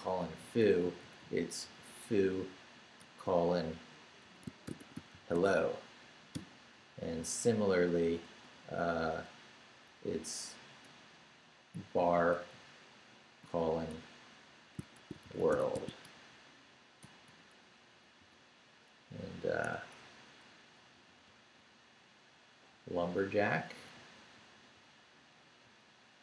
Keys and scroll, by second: 0.6 Right, 2.7 shift+Right, 3.0-6.3 typing, 6.7 Right, 9.6 BackSpace, 10.8 ,, 11.7 Right, 13.1 shift+Right, 13.4-17.2 typing, 17.9 Right, 18.2 Escape, 19.0 Left, 19.7 ↺, 20.0 Right, 20.9 Escape.